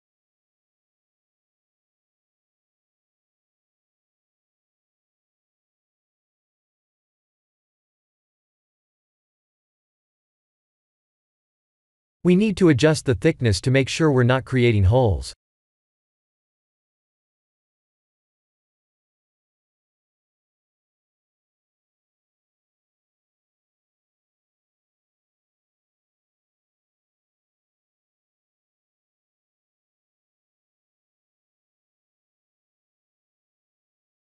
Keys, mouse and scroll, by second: 5.7-7.9 alt+middle drag, 10.3-11.7 drag, 23.4 click, 25.6 click.